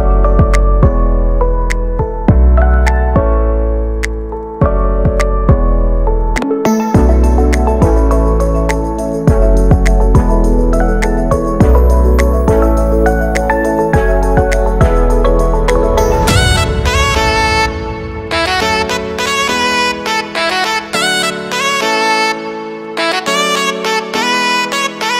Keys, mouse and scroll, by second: 0.4 right click, 0.6 scroll down 1, 0.8 shift+middle click, 1.1 Tab, 1.9 right click, 2.6 x, 2.9 shift+middle click, 3.4 ctrl+r, 4.3 scroll up 2, 4.4 shift+middle click, 4.7 ctrl+r, 5.4 scroll up 1, 5.6 ctrl+r, 7.3 shift+middle click, 7.6 scroll up 1, 7.9 ctrl+r, 9.6-10.0 scroll down 3, 10.0 z, 10.2 shift+middle click, 10.7 a, 10.8 a, 10.9 b, 12.1 click, 12.7 b, 12.9-14.1 middle drag, 14.1 b, 14.7 b, 15.2 x, 15.5 shift+middle click, 16.2 right click, 16.5 l, 16.8-17.3 scroll down 1, 17.4 z, 17.7 shift+d, 18.1 r, 20.4 middle click, 20.8 g, 21.1 shift+Tab, 21.3 g, 21.7 shift+middle click, 22.0 scroll up 2, 22.2-23.2 shift+middle drag, 23.2 z, 23.7-24.0 scroll up 1, 24.0 scroll down 2, 24.2 g, 25.0 middle click.